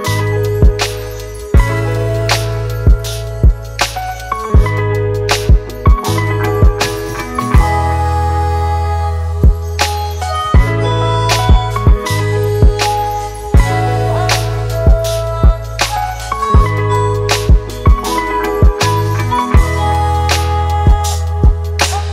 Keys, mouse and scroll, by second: 2.3-2.6 typing, 2.9 double click, 7.5-8.5 typing, 9.7 double click.